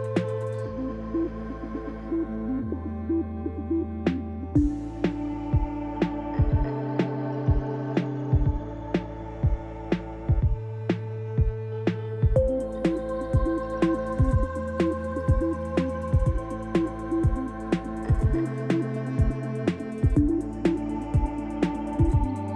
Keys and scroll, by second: 0.4 0, 1.5 shift+z, 2.9 shift+z, 6.0 shift+d, 6.1 x, 9.3 1, 9.5 0, 9.7 Return, 13.6 3, 14.0 Return, 15.9 alt+r, 17.1 r, 20.1 0.